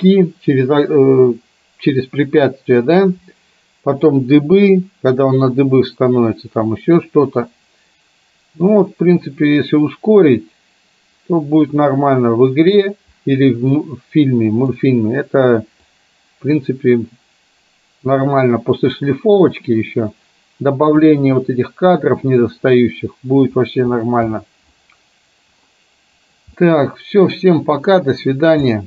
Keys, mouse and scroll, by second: 4.3-12.9 drag, 13.8-14.8 middle drag, 16.1-21.1 drag, 26.7 middle click, 28.8 middle click.